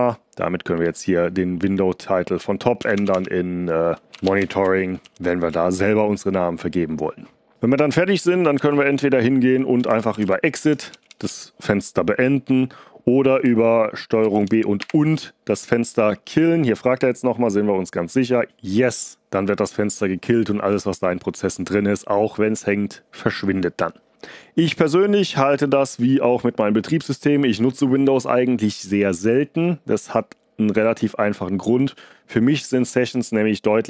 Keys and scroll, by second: 2.7-5.6 typing, 8.5-11.2 typing, 14.1 ctrl+b, 14.7 &, 18.1 <, 18.4 y.